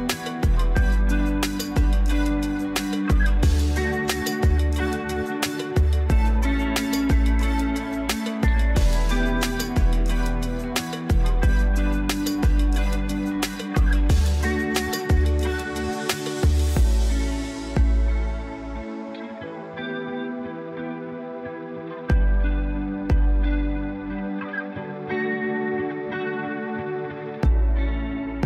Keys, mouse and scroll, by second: 12.0-12.7 typing.